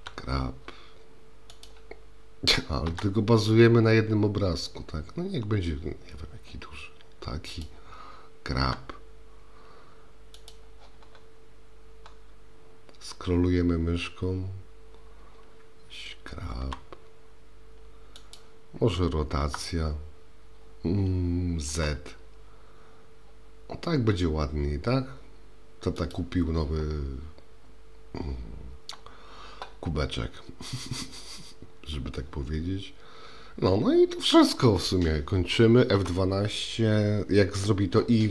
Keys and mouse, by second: 2.9 s, 8.6 g, 16.7 g, 19.4 r.